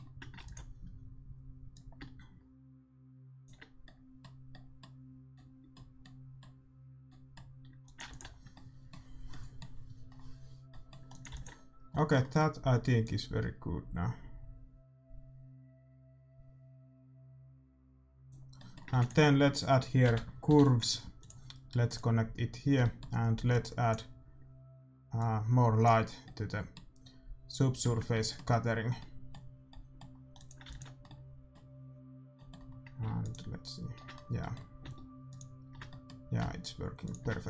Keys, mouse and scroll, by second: 0.4 ctrl+s, 1.7-3.7 drag, 7.8-10.7 drag, 7.8-10.7 middle drag, 8.0 ctrl+s, 11.1-12.6 drag, 11.1-12.6 middle drag, 11.6 ctrl+s, 14.4 click, 18.5 middle click, 18.9 shift+a, 21.9-27.0 drag, 22.8-25.1 middle drag, 26.2-31.9 middle drag, 30.3-32.1 drag, 30.6 ctrl+s, 33.8-37.4 drag.